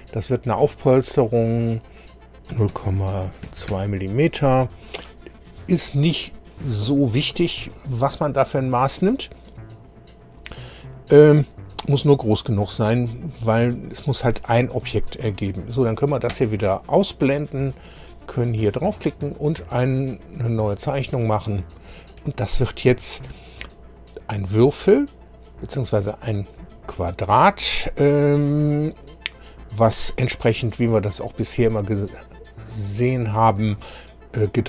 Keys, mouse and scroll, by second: 1.1 click, 2.5 KP_0, 2.7 KP_Decimal, 3.4 KP_2, 3.7 KP_Enter, 4.7 scroll down 2, 5.7-6.0 scroll down 2, 15.7 click, 16.3 space, 18.1 click, 20.9 click, 22.4-23.0 shift+scroll up 1, 23.1 shift+middle click, 24.2-24.8 scroll up 3, 26.0-26.4 scroll up 2, 26.7 scroll down 2, 33.5 click, 34.4 click.